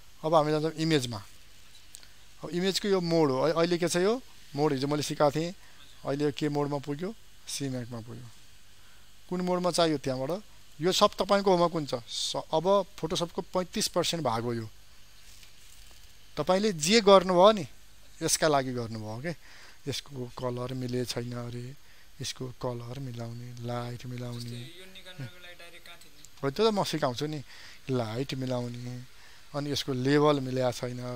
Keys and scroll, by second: 20.7 ctrl+m, 31.0 ctrl+l.